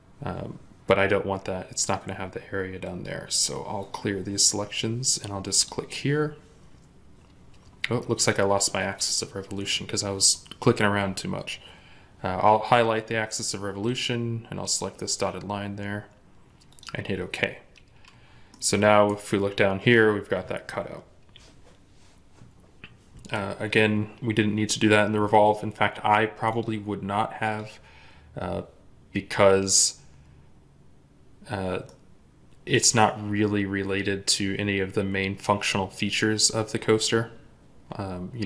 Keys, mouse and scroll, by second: 2.6 right click, 17.8-18.3 scroll up 1, 18.3 middle click, 29.1-31.0 scroll down 1, 31.7 middle click, 37.6-38.4 scroll down 1.